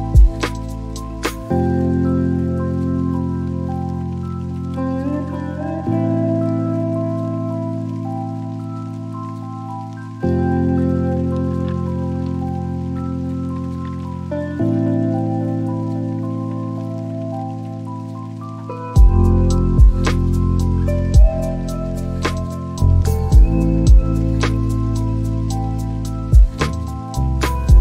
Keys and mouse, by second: 0.7-2.0 drag, 3.1-4.4 drag, 10.7 shift+middle drag, 14.8 right click, 24.5-26.8 drag.